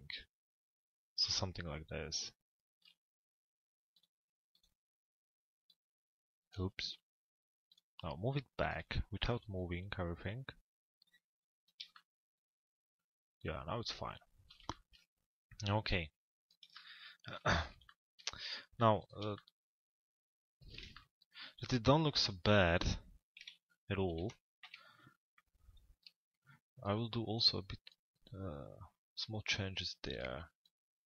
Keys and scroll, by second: 23.1 f, 24.1 l, 24.7 z.